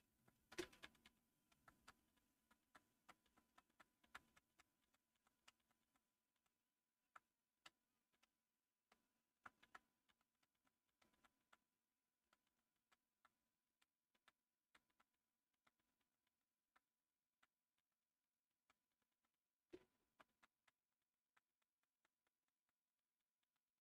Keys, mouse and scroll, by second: 0.2 Down, 0.5 Down, 0.6 Down, 0.9 Down, 1.4 Down, 1.6 Down, 1.8 Down, 2.0 Down, 2.2 Down, 2.5 Down, 2.8 Down, 3.1 Down, 3.5 Down, 3.9 Down, 4.4 Down, 5.0 Down, 5.2 Down, 5.4 Down, 5.6 Down, 6.9 Down, 7.4 Down, 9.2 Down, 9.9 Down, 10.2 Down, 10.4 Down, 11.0 Down, 11.3-13.2 Down, 13.5 Down, 14.0 Down, 14.7 Down, 16.5 Down, 16.7 Down, 16.9 Down, 17.6 Down, 17.9-19.2 Down, 19.4 Down, 19.6 Down, 20.1 Down, 21.6 Down, 21.8 Down, 22.0-23.5 Down, 23.7 Down.